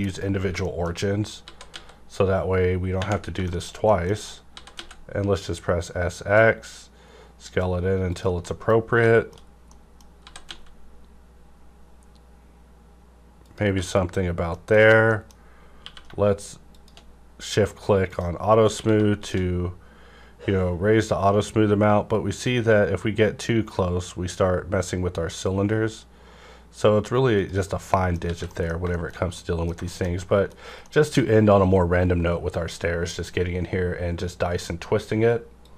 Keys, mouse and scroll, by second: 0.0 click, 0.7 middle click, 0.7 click, 1.0-1.4 scroll up 1, 1.4-2.5 typing, 3.2 scroll down 1, 3.4 shift+middle click, 3.9 shift+middle click, 4.1 scroll up 1, 4.5 typing, 8.1 click, 8.4 middle click, 8.4 middle click, 9.0 shift+middle click, 9.4-9.7 shift+scroll up 2, 9.7 middle click, 10.2 typing, 13.4 click, 13.4 x, 13.7 Tab, 13.7 Right, 14.2-14.6 scroll down 2, 14.5 middle click, 14.8 scroll up 1, 15.1 middle click, 15.8 q, 16.7 shift+click, 17.3 scroll up 1, 18.4 scroll, 18.4 scroll down 1, 18.7 q, 19.2 shift+click, 19.5 scroll down 1, 20.9-21.2 scroll up 1, 22.7 scroll up 1, 27.4 click, 27.4 scroll up 1, 27.7 scroll down 1, 27.9 middle click, 28.3 alt+a, 28.5 middle click, 28.9 shift+middle click, 28.9 shift+middle click, 30.2 shift+middle click, 30.6 scroll down 1, 30.8 middle click.